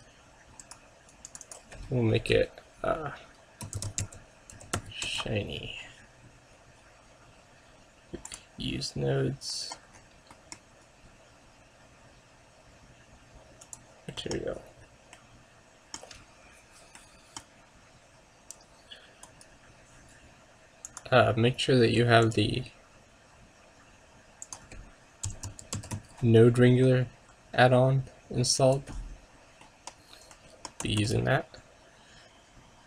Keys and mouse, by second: 6.7 middle click, 8.4-9.9 drag, 9.7 middle click, 12.4 middle click, 13.7 click, 14.4-17.0 middle drag, 17.0-18.7 middle drag, 19.4-21.4 right drag, 21.0-22.9 drag, 29.9 middle click, 31.1 shift+s.